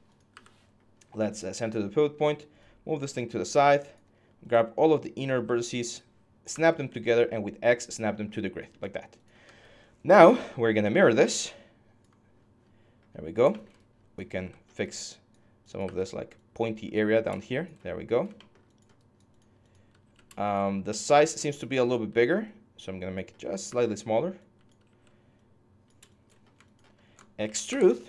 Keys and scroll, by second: 0.1 w, 3.8 4, 5.1-8.4 typing, 15.6 w, 17.6 6, 19.8 r, 20.5 4, 21.5 r, 23.4 w, 24.6 r, 26.3 alt+f, 27.2 ctrl+e.